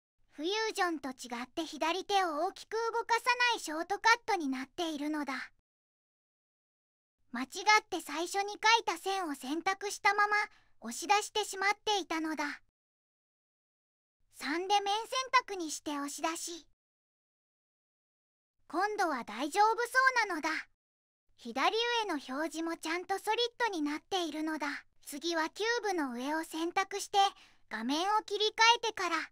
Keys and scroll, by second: 0.5 2, 0.7 0, 2.0 Return, 3.0 Return, 11.5 ctrl+z, 11.9 ctrl+z, 12.5 ctrl+z, 13.1 ctrl+z, 14.5 3, 18.0 1, 18.0 2, 18.3 0, 18.5 Return, 19.0 Return.